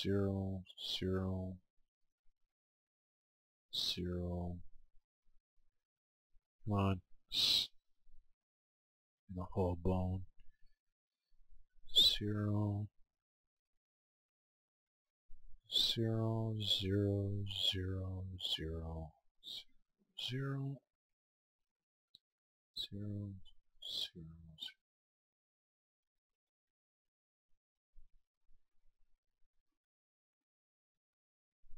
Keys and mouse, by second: 3.4 right click, 4.2-5.4 right drag, 5.6-8.5 right drag, 7.8-9.4 middle drag, 8.0 click, 9.4-11.3 right drag, 11.5-13.2 right drag, 12.6-13.6 middle drag, 14.8-17.1 right drag, 17.3-21.8 right drag, 20.9-23.1 middle drag, 22.4 right click, 23.4-29.1 right drag, 28.7 middle click, 29.3-31.0 middle drag, 29.3 right click, 31.0-31.7 right drag.